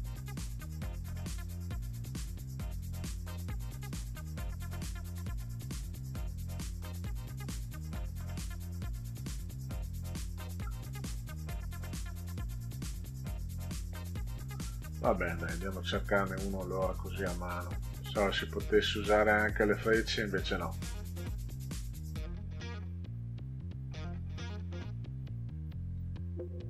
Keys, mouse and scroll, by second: 0.7 Down, 1.9 Down, 2.5 click, 3.1 click, 4.1 click, 4.4-7.0 drag, 7.9 click, 9.3-10.3 drag, 11.7 click, 12.9 click, 14.2 click, 15.0 click, 16.1 click, 17.1 click, 18.0 click, 19.1 click, 20.7 click, 21.7 click, 23.9 click, 25.1 click, 25.9 click.